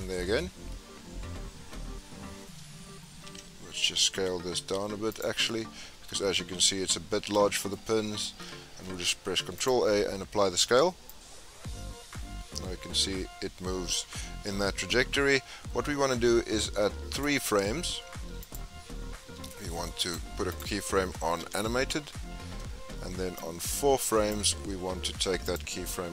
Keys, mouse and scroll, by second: 0.6-3.2 scroll up 12, 3.2 s, 5.3 scroll down 3, 5.4-8.8 middle drag, 8.8 ctrl+a, 11.1-14.1 drag, 18.4 click, 20.0 click, 23.3-25.5 drag.